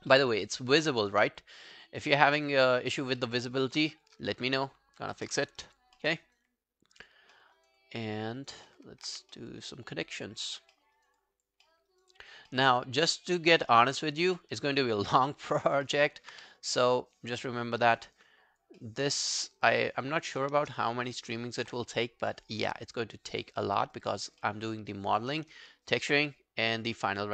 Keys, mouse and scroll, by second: 0.1 alt+middle click, 0.3 alt+right click, 0.5 alt+click, 0.9 alt+middle click, 1.1 alt+right click, 1.4 alt+click, 1.8 alt+middle click, 2.0 alt+scroll down 1, 2.3 alt+right click, 2.5 alt+click, 3.2 alt+middle click, 3.5 alt+right click, 5.0 ctrl+i, 5.6 alt+click, 6.0 alt+middle click, 6.3 alt+right click, 6.5 alt+click, 7.4 alt+middle click, 7.6 alt+right click, 7.8 alt+click, 8.4 alt+right click, 8.7 alt+middle click, 9.1 q, 9.4 alt+middle click, 9.6 alt+right click, 9.9 alt+click, 10.8 alt+middle click, 11.0 alt+right click, 11.2 alt+click, 11.7 alt+middle click, 11.9 alt+right click, 12.1 alt+click, 12.5 alt+middle click, 13.1 alt+middle click, 14.8 alt+middle click, 15.1 alt+right click, 15.3 alt+click, 15.9 alt+middle click, 16.3 alt+q, 16.5 right click, 18.0 scroll down 2, 18.2 alt+click, 18.8 alt+middle click, 19.0 alt+right click, 19.3 alt+click, 19.7 alt+middle click, 19.9 alt+right click, 20.2 alt+click, 21.1 alt+right click, 21.4 alt+middle click, 22.4 shift+click, 22.8 alt+click, 23.6 alt+middle click, 23.9 alt+right click, 24.1 alt+click, 24.4 alt+middle click, 24.8 alt+right click, 25.1 alt+click, 25.8 shift+right click.